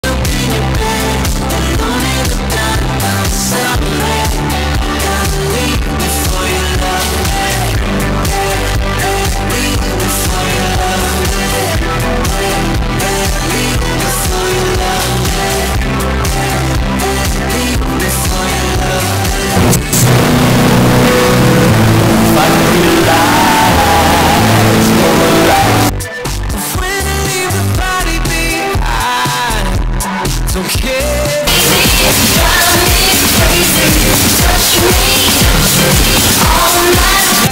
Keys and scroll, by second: 0.1 ctrl+q, 2.0 a, 2.9 Up, 3.1 Up, 3.1 Up, 3.3 Up, 3.5 Up, 3.8 Return, 26.1 Page_Down.